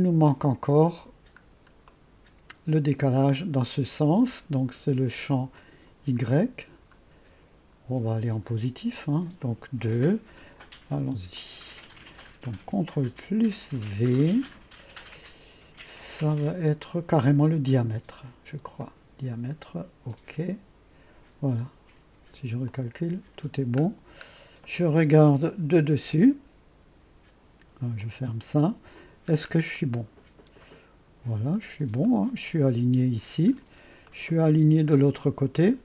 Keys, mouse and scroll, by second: 0.0-1.2 drag, 1.5-2.0 scroll up 1, 2.0 right click, 5.6 click, 8.2-10.1 scroll up 2, 11.4 click, 14.2 ctrl+v, 18.9-20.8 drag, 20.9-21.3 drag, 22.7-23.6 drag, 26.9 1, 28.1-28.9 drag, 29.1 middle click, 29.1-30.1 typing, 29.5 middle click, 29.8 middle click, 29.9 click, 30.1 click, 30.3-31.2 right drag, 30.6-31.2 scroll up 1, 31.2 scroll up 1, 32.1-33.7 drag, 32.1-33.7 right drag, 32.1-32.9 scroll up 1, 33.7-34.2 scroll down 1, 34.2 click, 34.5-35.8 right drag, 35.2-35.8 scroll up 1.